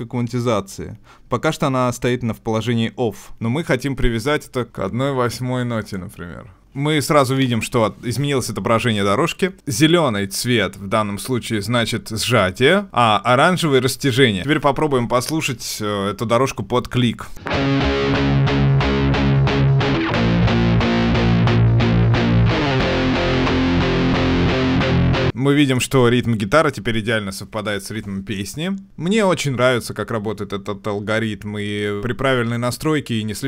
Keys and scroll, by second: 6.6 ctrl+alt+Right.